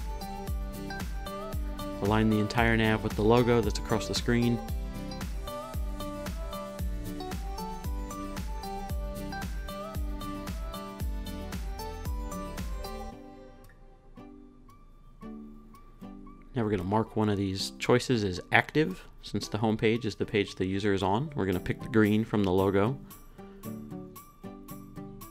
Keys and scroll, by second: 0.5 Right, 1.1 Down, 1.6 Right, 2.0 Up, 2.3 Down, 2.5 Right, 3.6 Left, 4.2 Right, 5.0 Right, 5.4 Left, 6.6 Left, 9.9 super+s, 13.4 r, 18.0 super+v.